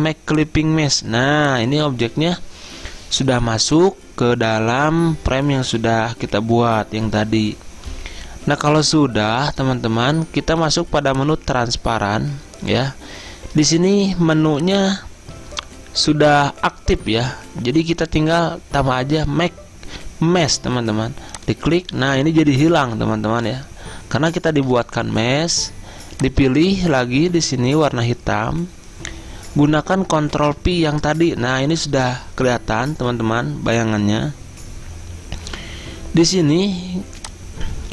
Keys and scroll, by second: 30.4 ctrl+f.